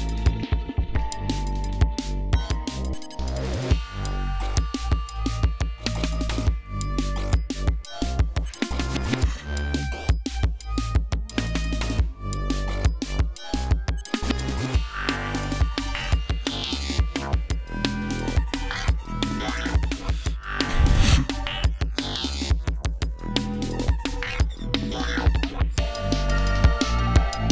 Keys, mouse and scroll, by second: 1.1-2.5 drag, 3.1 click, 4.7 click, 6.2 ctrl+scroll down 2, 6.6 ctrl+scroll up 2, 20.5-20.9 scroll up 2, 22.5 click, 23.4 click, 24.6-25.8 drag, 25.9-27.5 drag.